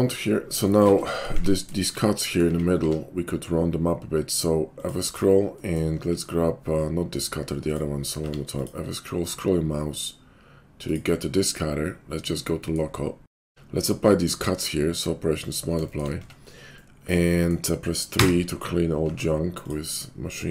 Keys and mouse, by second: 1.3 Tab, 2.5 Tab, 2.8 q, 7.6 click, 7.7-15.8 middle drag, 8.2 q, 11.9 /, 13.2 KP_5, 13.3 q, 15.8 shift+click, 16.0-20.5 middle drag, 16.2 Tab, 18.1 3, 19.1 Tab.